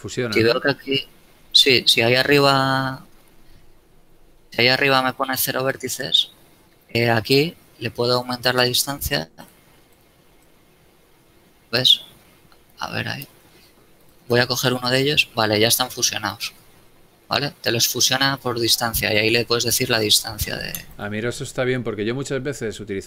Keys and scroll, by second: 2.9 space, 13.6 a, 14.9 g, 17.2 a, 20.5 g.